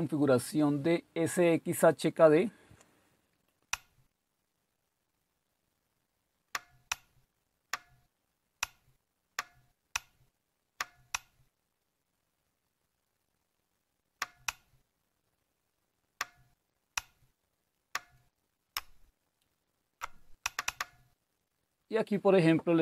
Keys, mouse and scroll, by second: 1.6-2.3 scroll down 1, 2.3-3.7 scroll down 1, 3.7 scroll down 1, 3.7 Down, 4.2-7.7 Down, 8.6 Down, 9.3 Down, 9.9-14.1 Down, 14.5 Down, 14.9 Down, 15.1-16.2 scroll down 27, 16.9 scroll down 3, 17.4 Down, 17.5-18.1 scroll down 7, 18.7 scroll down 2, 19.2-19.7 Up, 20.4 Down, 20.6 Down.